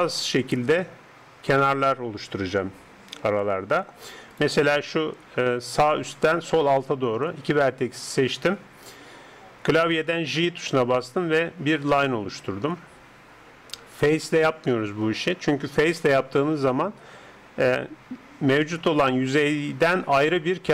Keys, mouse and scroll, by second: 12.4 j.